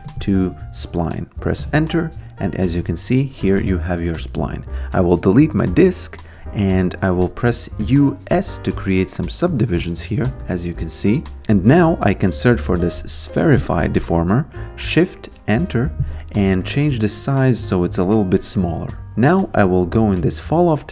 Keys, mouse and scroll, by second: 0.0-1.3 typing, 1.6 Return, 2.5 click, 5.2 click, 5.7 Delete, 6.6 click, 7.8 u, 8.3 s, 8.9 v, 10.4 click, 11.8-13.4 typing, 14.9 shift+click, 16.3 t, 16.6 click, 19.1 click.